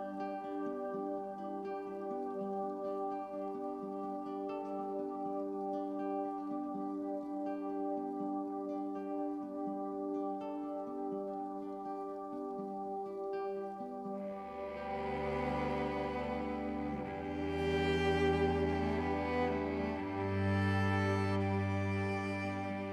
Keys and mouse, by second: 0.5-1.6 drag, 1.8 click, 3.0-4.0 drag, 4.6-6.6 drag, 6.9 click, 7.8 click, 9.1 click, 9.8-10.8 drag, 11.0 click, 12.2 click, 13.3 alt+click, 14.7-16.5 drag, 16.8 alt+click, 17.5-18.8 drag, 19.0-20.1 drag, 20.2-21.7 drag, 21.8 click.